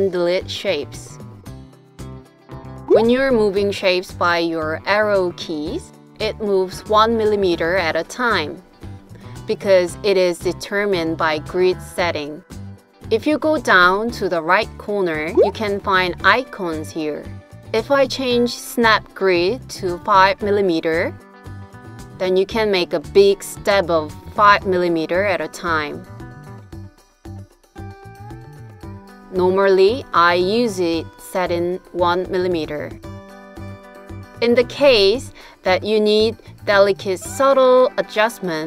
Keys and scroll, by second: 3.4 Right, 3.9 Right, 5.7 Down, 6.4 Down, 9.1 Up, 9.6 Up, 10.7 Right, 21.0 Right, 21.9 Right, 23.2 Down, 23.5 Down, 23.8 Down, 24.2 Down, 24.5 Down, 25.5 Down, 26.8 Up, 27.1 Up, 27.4 Up, 32.3 Right, 32.7 Right.